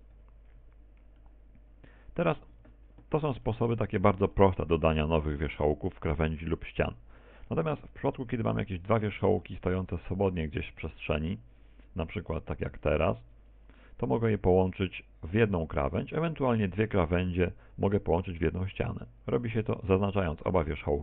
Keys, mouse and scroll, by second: 0.1 KP_1, 1.2 middle click, 2.6 Tab, 3.5 shift+middle click, 4.3 middle click, 5.2 middle click, 7.5 shift+middle click, 8.4 right click, 9.3 shift+right click, 9.7 shift+d, 10.3 click, 11.5 right click, 12.3 shift+d, 12.9 click, 13.1 shift+d, 13.6 click.